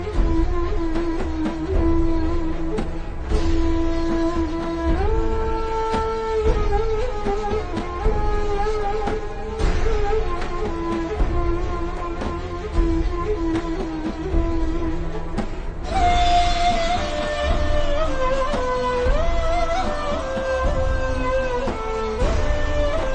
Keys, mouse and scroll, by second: 0.1 click, 21.1-21.5 alt+shift+scroll up 3, 21.5 click, 22.3-22.8 alt+scroll down 2, 22.8 click.